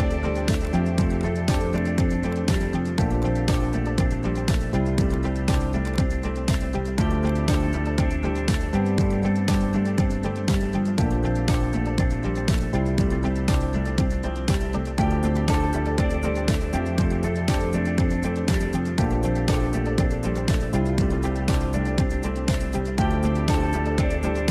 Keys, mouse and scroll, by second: 0.0 shift+click, 1.3 click, 2.3-3.2 drag, 6.0 click, 7.3 click, 7.6 middle click, 8.6 Tab, 9.6 alt+h, 9.8-10.3 middle drag, 10.5 click, 11.5 ctrl+i, 12.2 h, 12.6 click, 13.0 Tab, 13.3-13.8 scroll down 1, 16.3 click, 16.6-18.2 middle drag, 19.3 shift+click, 19.6 middle click, 20.5 shift+click, 20.7 scroll up 1, 20.8 middle click, 21.1-24.5 middle drag.